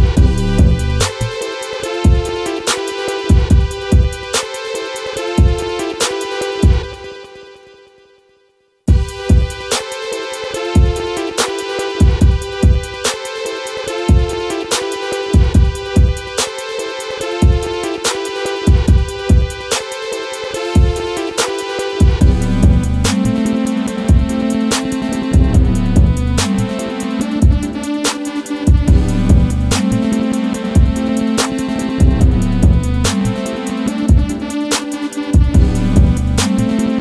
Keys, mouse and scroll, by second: 0.5 x, 1.4 right click, 2.5 click, 4.0 ctrl+v, 4.5 ctrl+click, 5.9 ctrl+z, 6.3 ctrl+click, 6.6 right click, 7.4-13.4 drag, 13.9-19.4 drag, 20.8 right click, 21.7-24.6 drag, 26.2 ctrl+click, 27.3 ctrl+z, 27.6 ctrl+right click, 28.5 click, 31.6 click, 32.4 ctrl+v, 33.0-37.0 drag.